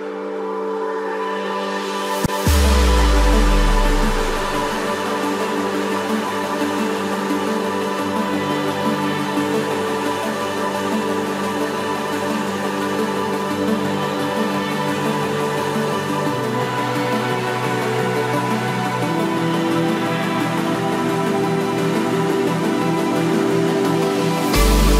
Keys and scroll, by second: 5.0 ctrl+z, 17.0 ctrl+d.